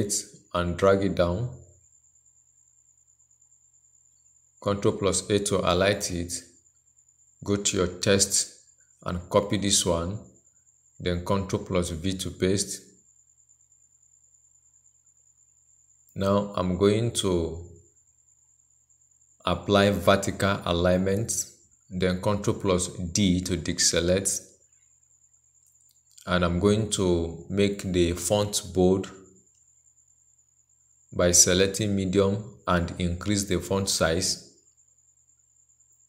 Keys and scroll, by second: 5.1 ctrl+a, 10.2 ctrl+c, 11.7 ctrl+v, 18.0 ctrl+a, 23.0 ctrl+d.